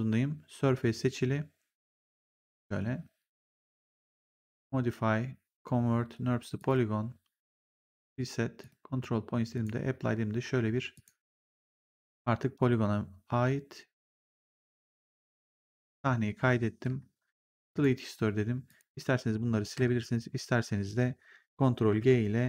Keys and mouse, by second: 2.0 click, 4.3 click, 6.5 click, 10.8 click, 14.8 click, 17.6 click, 19.9 click, 21.8 ctrl+g.